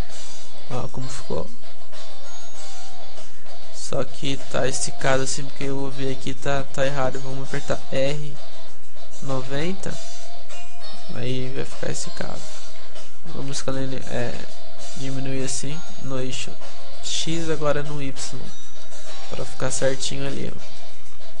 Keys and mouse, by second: 0.5-3.2 middle drag, 3.2 Tab, 7.7-9.2 middle drag, 7.7 r, 11.5-13.7 middle drag, 13.0 s, 17.5 click, 17.5 s, 20.1 Tab, 20.1-21.4 drag, 21.3 a.